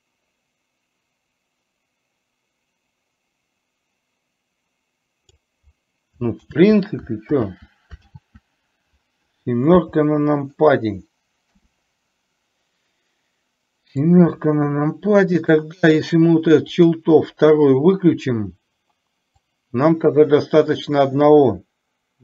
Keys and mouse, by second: 6.4 ctrl+z, 14.2-15.7 drag, 16.8 click, 19.7-22.2 drag.